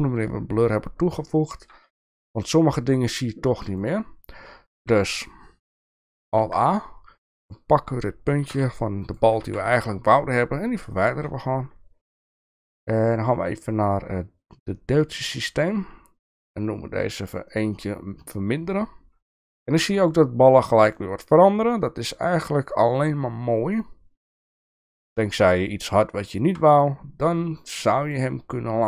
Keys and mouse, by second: 0.0 shift+middle click, 1.4 shift+middle click, 3.8 click, 4.8 Tab, 6.4 alt+a, 8.5 x, 9.4 Tab, 10.2 middle click, 10.9-11.3 shift+middle drag, 15.0 click, 17.5 click, 21.0-26.6 shift+middle drag, 28.0 click.